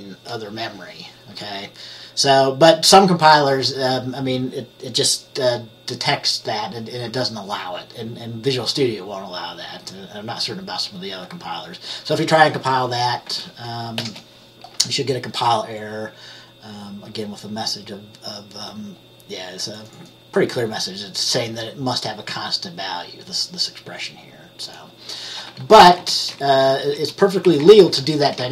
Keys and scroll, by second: 14.1 ctrl+b, 26.0 typing, 26.7 Down, 26.8 Down, 27.1 Down, 27.6 Left, 27.7-28.5 typing, 27.7 Left.